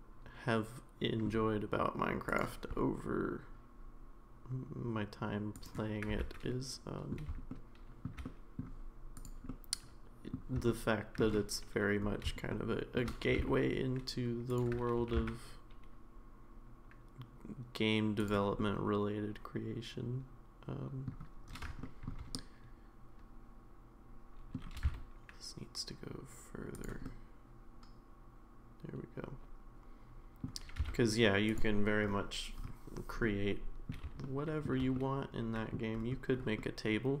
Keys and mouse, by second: 6.5 middle click, 7.5 shift+middle click, 8.2 middle click, 9.2 click, 9.6 middle click, 10.7 shift+middle click, 12.5 shift+middle click, 13.3 g, 15.0 g, 18.6-21.1 middle drag, 21.8 shift+middle click, 22.3-24.6 middle drag, 24.7 g, 27.0-30.4 middle drag, 30.7 g, 33.2 middle click, 34.2 shift+middle click, 34.9 middle click, 36.6 middle click.